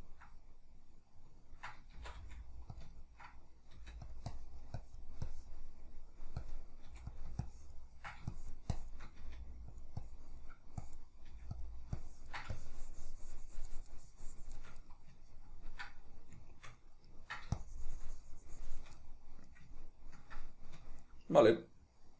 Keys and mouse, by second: 2.1 shift+c, 2.3 f, 2.9 click, 3.1-4.2 ctrl+middle drag, 3.9 f, 4.4-6.0 drag, 6.0 middle click, 6.6 click, 7.0 f, 7.6-10.0 ctrl+drag, 9.4 f, 10.2-11.8 drag, 11.4 f, 12.1-15.0 ctrl+drag, 15.0-17.7 middle drag, 17.7-19.2 shift+drag, 19.2-22.1 middle drag.